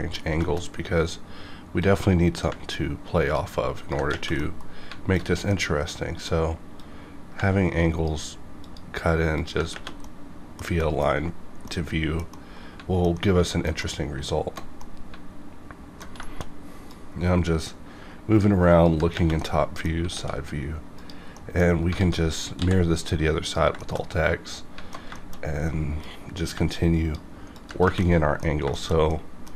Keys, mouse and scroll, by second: 0.4 shift+middle click, 1.8-3.8 drag, 4.4 middle click, 5.2 scroll down 2, 5.5 middle click, 6.8-8.6 drag, 10.0 middle click, 11.2-11.6 scroll up 1, 11.6 middle click, 12.3 middle click, 13.4 alt+middle click, 14.8 middle drag, 16.2 shift+middle drag, 16.9-18.8 drag, 19.4 middle click, 20.1 alt+x, 21.0 click, 21.3 middle click, 22.0 alt+x, 22.6 x, 23.4 click, 23.8 shift+middle click, 25.1 shift+middle click, 25.5-26.0 scroll up 1, 26.0-27.5 drag, 28.0 middle click, 28.5 scroll down 1, 28.7 shift+middle click, 29.4-29.5 middle drag.